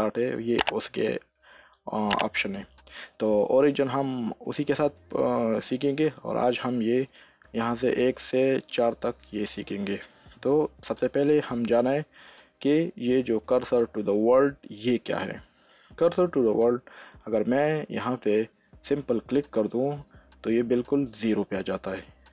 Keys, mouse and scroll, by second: 1.8 shift+s, 2.5 shift+s.